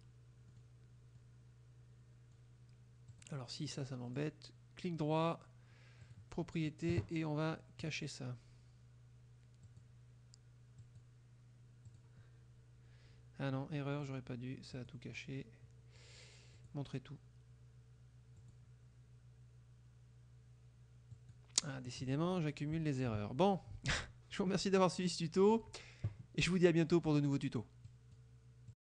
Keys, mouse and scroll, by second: 0.5 middle click, 1.2-2.6 drag, 3.2 click, 4.2 right click, 6.1 click, 7.9 click, 9.7 click, 10.9 click, 11.9 click, 14.8 click, 16.6 click, 18.4 click, 21.2 click, 21.9 click, 24.4-25.7 drag, 24.4-25.7 middle drag, 27.9 click, 28.7 click.